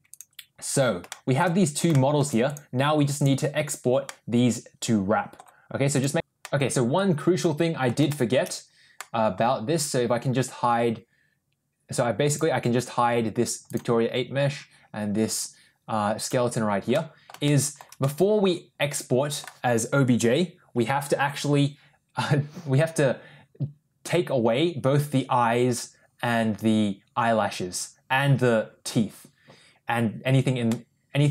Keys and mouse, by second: 1.0 shift+middle click, 1.8 shift+middle drag, 3.9-5.2 middle drag, 6.3-7.7 middle drag, 8.0 shift+middle click, 8.8 middle click, 12.1 click, 13.5 click, 16.1 click, 16.8 middle click, 17.3 shift+middle click, 17.8-19.2 middle drag, 30.5-31.3 middle drag.